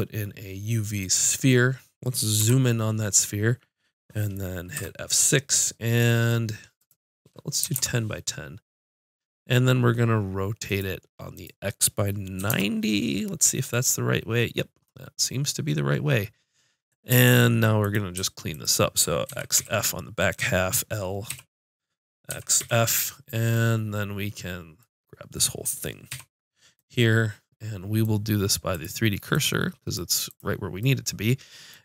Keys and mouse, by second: 2.3 KP_Decimal, 4.7 F6, 17.2 ctrl+Tab, 18.5-21.2 drag, 19.2 x, 21.2 l, 22.3 x, 26.1 l, 28.7-30.5 drag.